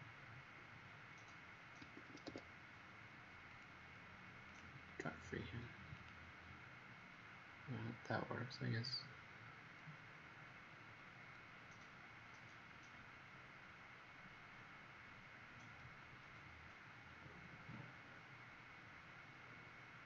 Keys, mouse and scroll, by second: 0.5 scroll down 2, 1.7 Escape, 2.2 Escape, 3.4 click, 12.3 middle click.